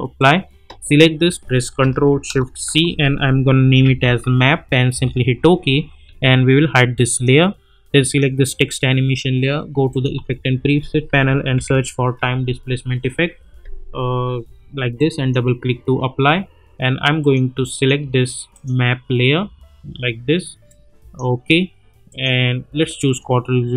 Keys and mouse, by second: 2.6 ctrl+shift+c, 3.4-4.5 typing, 4.9 Return, 7.1 click, 10.1 ctrl+a, 10.8-13.0 typing, 14.9-21.3 drag.